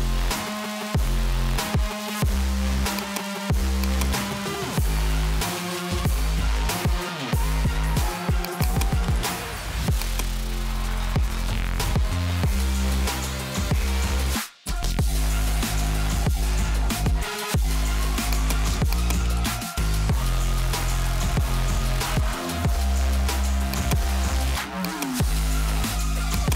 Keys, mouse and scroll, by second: 3.1 click, 4.1-6.4 click, 5.9-7.0 typing, 8.5 click, 8.7 click, 10.1 click, 11.1 2, 11.3 2, 12.0 Tab, 12.7-14.1 typing, 23.8 click, 24.9 click, 26.0 0, 26.5 click.